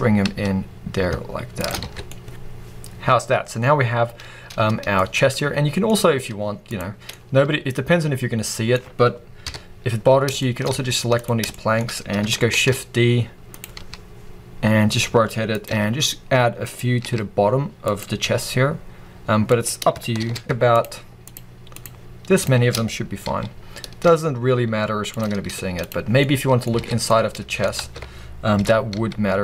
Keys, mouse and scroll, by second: 1.6 shift+click, 1.7 alt+a, 1.8 scroll down 2, 2.0-6.6 middle drag, 6.0-6.6 scroll up 2, 6.6 click, 7.0-13.5 middle drag, 9.3 KP_3, 9.9-10.3 scroll up 2, 10.5 scroll up 2, 10.6 z, 11.7-12.4 scroll up 2, 12.4 shift+d, 13.5 click, 13.7 r, 15.5 click, 15.6 g, 16.6 click, 16.9 r, 17.9 click, 18.1 g, 19.6 click, 20.1 shift+d, 20.6 shift+click, 21.1 shift+click, 21.6 shift+drag, 22.2 shift+click, 23.2 g, 25.1 shift+click, 25.3 z, 25.9 scroll down 1, 26.1-29.4 middle drag, 26.7 alt+a, 27.7 ctrl+z, 28.1-28.4 scroll up 2, 28.4 g.